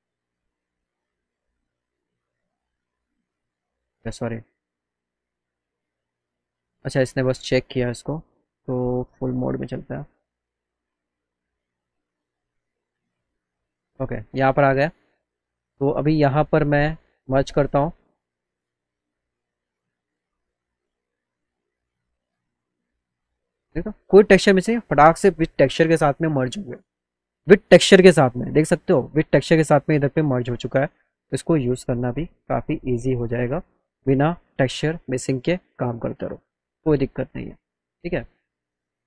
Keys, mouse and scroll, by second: 0.0 click, 4.3 click, 5.1 click, 6.0 click, 8.5 click, 10.1 click, 11.9 click, 14.5 click, 18.0 click, 23.3 alt+right click, 24.2 click, 28.1 click, 29.4-30.9 alt+drag, 31.1 click, 33.9 alt+click, 36.3 click, 36.7 click, 37.4 click, 38.0 right click, 38.3 alt+right click, 38.9 click.